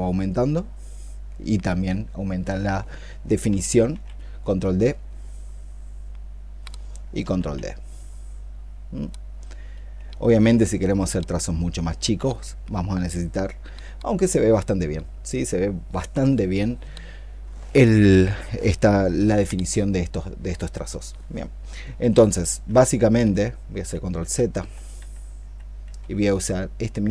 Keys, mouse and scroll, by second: 3.7 ctrl+d, 7.2 ctrl+d, 11.0 ', 11.5 ', 11.8 ', 22.1 ctrl+z, 22.5 ctrl+z, 22.9 ctrl+z, 23.6 ctrl+z, 24.0 ctrl+z, 24.4 ctrl+z, 24.8 ctrl+z, 25.3 ctrl+z, 25.7 ctrl+z.